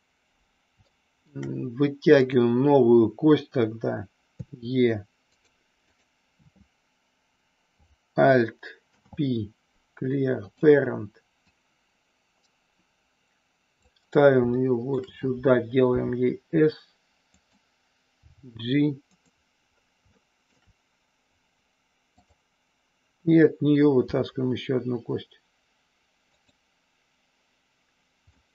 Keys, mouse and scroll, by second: 0.9 shift+middle click, 2.3 click, 4.4 e, 5.3 click, 5.9 click, 8.8 alt+p, 11.5-13.9 drag, 14.5 shift+middle click, 14.9 shift+scroll down 1, 15.9 s, 17.4 click, 18.2 g, 19.0 click, 20.2 middle click, 22.2 click, 24.0 e, 26.3 click, 28.4-28.5 middle drag.